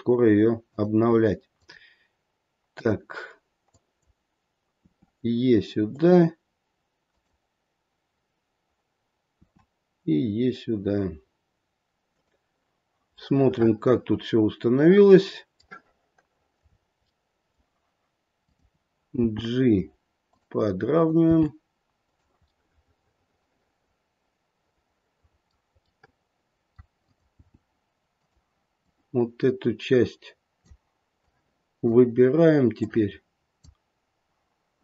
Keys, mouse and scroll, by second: 1.5 click, 2.7 click, 3.7 click, 4.8 e, 7.0 click, 9.3 e, 13.2 middle click, 13.7 middle click, 16.6-17.2 scroll up 3, 17.0 middle click, 17.2 middle click, 18.3 click, 19.1 g, 20.9 click, 21.2 g, 22.7 middle click, 24.6 middle click, 25.3 middle click, 25.9 middle click, 26.9 click, 27.4 g, 28.8 click, 31.2 click, 32.8 click.